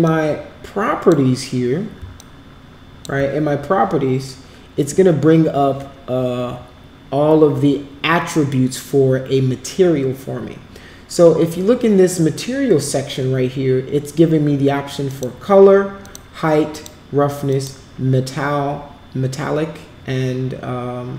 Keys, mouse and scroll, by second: 0.0-1.0 drag, 2.1 alt+click, 15.0 click, 16.0 click, 16.6 click, 17.4 click.